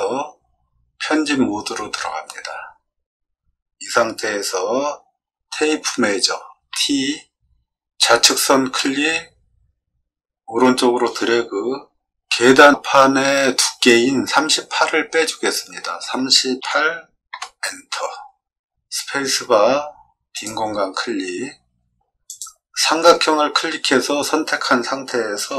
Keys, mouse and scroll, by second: 0.9-1.7 scroll up 2, 1.9 scroll down 2, 2.5-3.3 scroll up 1, 3.3-4.3 scroll down 1, 4.3-5.3 scroll down 1, 6.7 t, 8.2 click, 15.9 3, 16.5 8, 17.3 Return, 19.1 space, 20.3 click, 21.9 scroll up 2, 22.2 click.